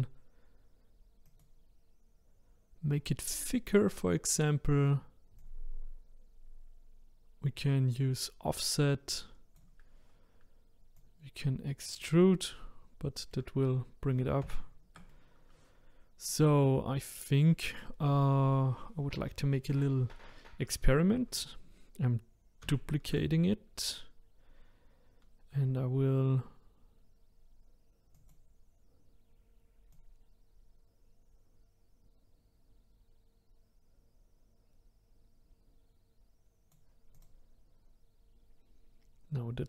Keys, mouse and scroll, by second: 1.3-8.4 drag, 11.0-12.2 drag, 12.2-13.6 middle drag, 13.6-14.4 scroll down 5, 14.4 ctrl+z, 15.1-17.3 middle drag, 17.3 click, 19.6 click, 22.7 shift+d, 28.1-33.0 drag, 37.1 click.